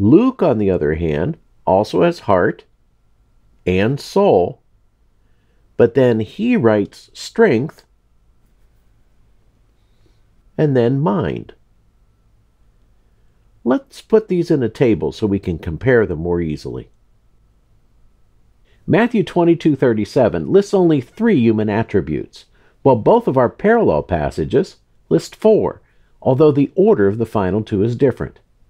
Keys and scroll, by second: 0.7 super+8, 3.7 super+8, 6.2 super+8, 9.4 super+8, 12.1 super+8.